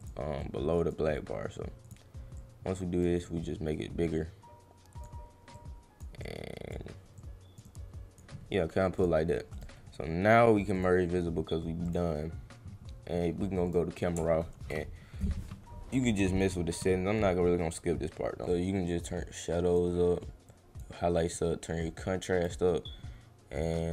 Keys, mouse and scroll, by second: 0.0 click, 0.4 click, 1.8 click, 2.4 click, 3.2-5.0 drag, 5.5 click, 6.2 click, 7.1 click, 7.6 click, 9.0 click, 9.5 right click, 10.7 click, 11.8 click, 13.7 click, 18.5-19.7 drag, 20.4 click, 21.3 click.